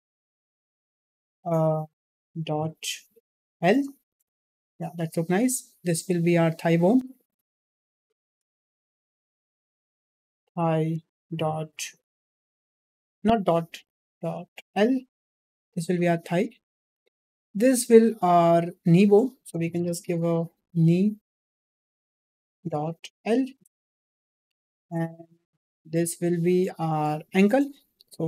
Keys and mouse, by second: 5.8 click, 6.6 click, 17.2 click, 17.5 shift+middle click, 18.2 click, 18.7 click, 20.8 e, 25.6 shift+middle drag, 26.8 click, 27.7-28.2 drag.